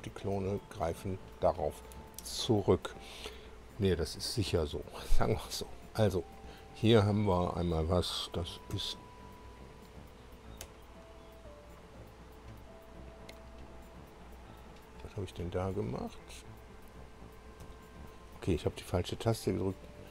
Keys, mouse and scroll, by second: 5.7 click, 8.7 F1, 10.6 Escape, 13.0 click, 13.8 click, 14.4 click, 15.9 click, 16.6 click, 17.6 F2.